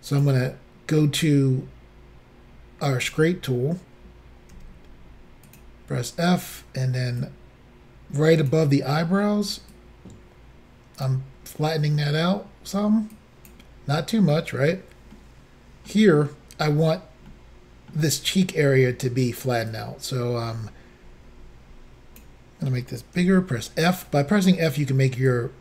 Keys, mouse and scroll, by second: 0.2 click, 3.1 click, 4.6 f, 5.5 click, 5.5 f, 7.2 click, 9.7 click, 13.1 click, 15.2 middle click, 17.3 middle click, 19.7 click, 23.2 f, 24.0 click, 25.3 click.